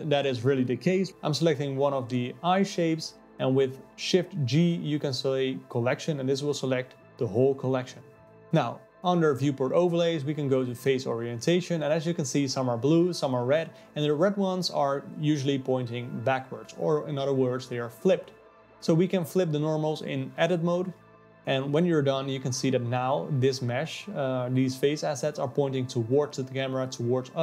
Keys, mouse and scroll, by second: 0.9 click, 1.9 shift+g, 3.8 KP_Divide, 4.8 KP_7, 6.5-9.7 drag, 10.6 alt+a, 10.9 click, 11.7 click, 12.1 g, 14.4 Tab, 14.4 alt+a, 15.4 alt+n, 15.7 Tab, 15.8 Tab, 15.9 click, 15.9-18.9 typing, 16.0 Tab, 16.3 alt+n, 16.4 Tab, 16.5 click, 16.6 click, 16.6 click, 16.7 click, 17.0 Tab, 17.2 alt+n, 17.4 Tab, 17.5 alt+middle click, 17.7 click, 17.9 alt+middle click, 18.1 click, 18.4 click, 18.7 KP_Divide, 20.3 click, 23.1-24.2 middle drag, 24.2-25.2 scroll up 9, 25.2-27.4 drag.